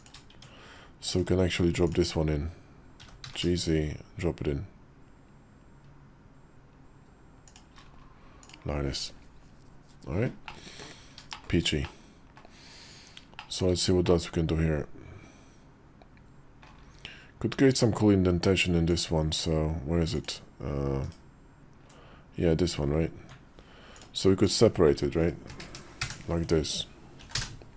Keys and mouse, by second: 0.2 Tab, 1.0 /, 2.8 g, 10.3 middle click, 11.2 shift+middle click, 11.7 middle click, 13.2 shift+middle click, 13.9-16.5 middle drag, 18.7 click, 20.1 click, 20.9 /, 23.0 Tab, 23.8 click, 25.3 ctrl+KP_Add, 25.5 ctrl+KP_Add, 25.9 ctrl+KP_Add, 27.0 p.